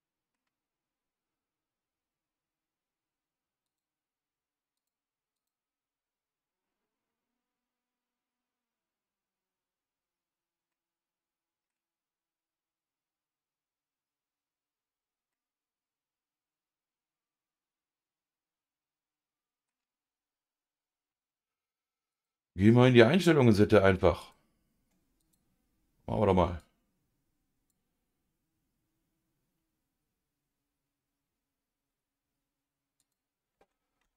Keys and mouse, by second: 3.6 click, 4.7 click, 10.7-11.7 middle drag, 15.3-19.7 middle drag, 22.1 click, 24.2-25.6 drag.